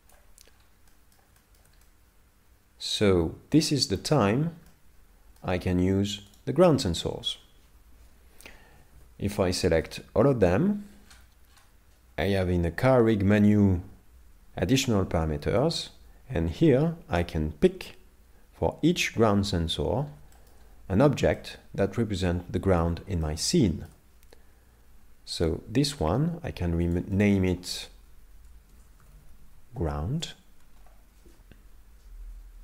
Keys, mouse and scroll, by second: 0.5 scroll down 5, 0.9 middle click, 1.4 shift+middle click, 1.8 middle click, 4.0 scroll up 4, 4.7 middle click, 6.4 right click, 8.7 a, 9.6 shift+middle click, 11.0 scroll down 1, 12.3 scroll down 17, 15.6 shift+middle click, 19.9-20.3 scroll down 3, 20.3 shift+middle click, 21.4 middle click, 23.3 shift+middle click, 25.4 right click, 26.9 click.